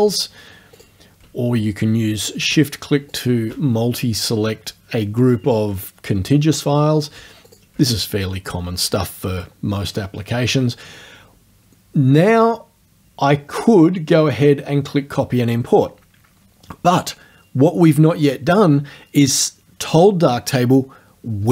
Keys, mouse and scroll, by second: 0.8 ctrl+click, 3.2 shift+click, 7.5 ctrl+click, 9.2-9.8 scroll down 4.